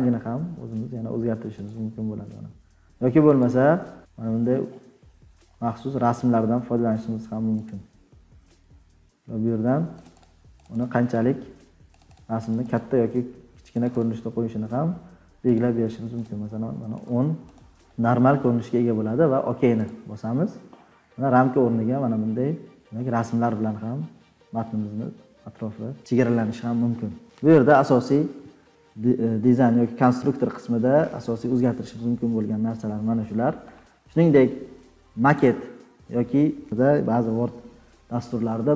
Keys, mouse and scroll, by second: 1.6 click, 4.5-7.5 scroll down 21, 7.6 click, 10.0 click, 10.1 click, 10.6 click, 10.8 click, 11.1 click, 11.9 click, 12.1 click, 12.4 click, 12.7 click, 13.8 click, 13.9 click, 15.5 click, 15.6-16.2 scroll, 16.2-16.7 scroll, 17.0-18.5 scroll, 19.8 click, 20.6-21.0 scroll down 11, 21.5 scroll, 21.5 scroll down 6, 21.9 scroll, 23.3-24.0 scroll, 24.6 scroll, 25.0 scroll up 11, 25.7-26.1 scroll up 9, 26.1-26.8 scroll, 27.5-28.0 ctrl+scroll.